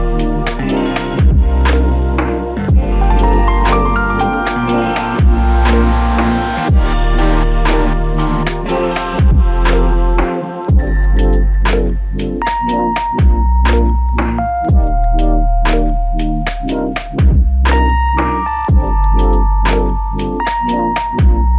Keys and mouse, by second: 4.5-5.2 s, 7.3 double click, 18.5 shift+click.